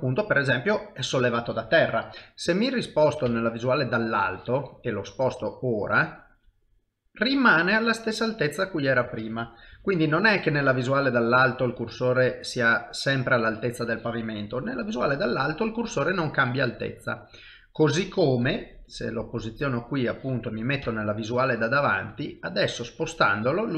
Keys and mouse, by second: 3.3 KP_7, 5.7 shift+right click, 6.6 middle click, 9.7 KP_7, 11.0 shift+right click, 11.9 middle click, 14.7 KP_7, 15.8 shift+right click, 19.6 shift+middle click, 20.8 KP_1, 22.6 shift+right click, 23.6 middle click.